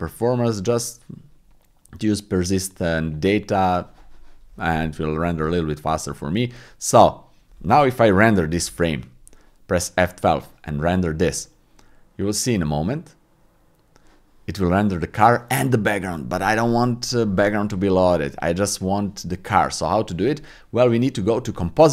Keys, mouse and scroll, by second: 3.0 click, 9.0 F12.